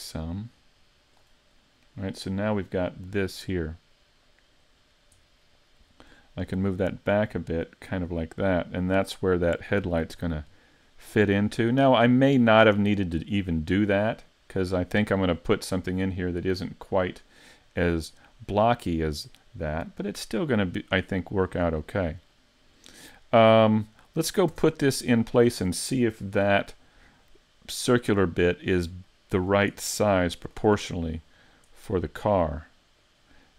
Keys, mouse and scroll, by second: 0.2 click, 1.6 middle click, 3.1 middle click, 4.8-5.3 scroll up 1, 5.3 middle click, 9.1 click, 10.2-10.8 scroll down 1, 10.8 middle click, 10.8-11.5 scroll down 1, 11.5-12.3 scroll up 3, 11.9 middle click, 19.9 middle click, 21.8-22.3 scroll down 3, 22.3 shift+middle click, 24.2-25.0 scroll down 2, 24.5 Tab, 28.2-28.5 scroll up 2, 28.5-29.1 scroll down 3, 29.1 shift+middle click, 30.4 shift+click, 30.8-31.5 scroll down 4, 31.8 middle click, 33.0 click.